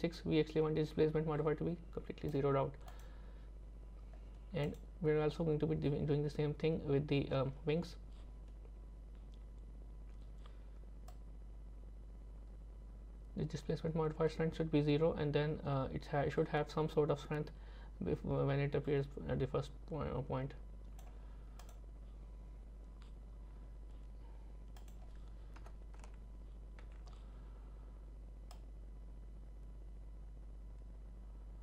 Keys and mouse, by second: 2.9 click, 4.7 click, 11.1-21.0 drag, 21.6 click, 24.8-26.0 drag, 28.6-31.6 drag.